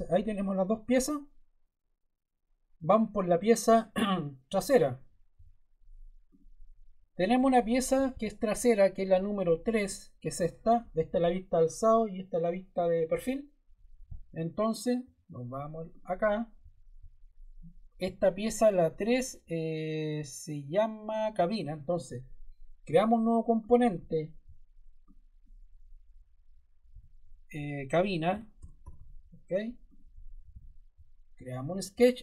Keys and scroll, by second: 26.8-29.4 typing.